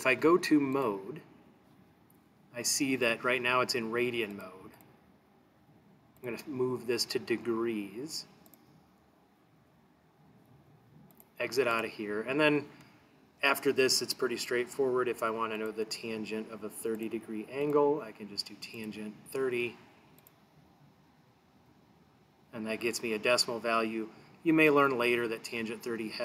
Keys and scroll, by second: 4.4 Down, 4.8 Down, 6.2 Right, 8.5 Return, 17.0 3, 17.7 0, 18.7 ), 20.2 Return.